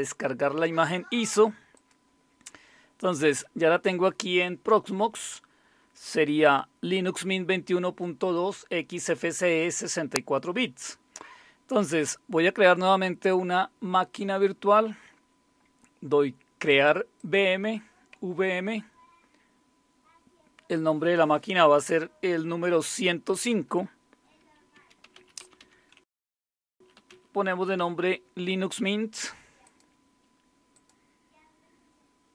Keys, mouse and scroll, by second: 1.7 click, 6.4 click, 17.2 click, 23.3 click, 24.0 click, 24.5-27.6 typing, 29.6 click.